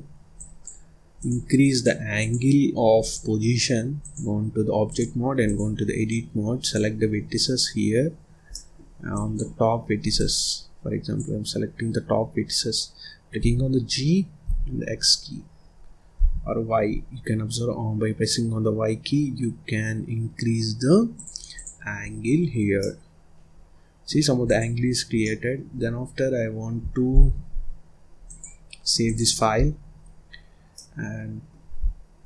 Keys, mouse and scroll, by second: 0.3 click, 1.1 click, 2.1 click, 2.9-6.6 drag, 7.3 click, 8.4 middle click, 9.0 click, 10.1 click, 13.3 g, 21.4 click, 21.9-22.3 scroll down 2, 22.3-22.7 scroll up 1, 22.7-24.1 middle drag, 24.1 scroll down 1, 24.3 click, 24.7 scroll up 2, 25.1-27.0 middle drag, 27.0 ctrl+s, 28.1-29.4 drag, 29.4-29.8 scroll down 1, 29.8-30.6 scroll up 4, 30.6-31.7 middle drag, 31.7-32.0 scroll down 1, 32.0-32.2 scroll up 1.